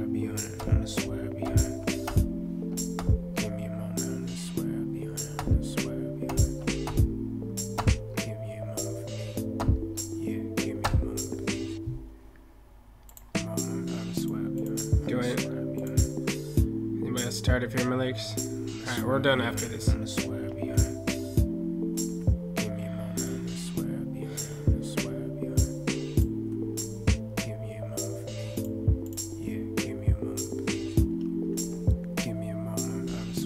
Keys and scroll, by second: 20.2 ctrl+F8, 26.5 ctrl+F8, 31.0 ctrl+F8.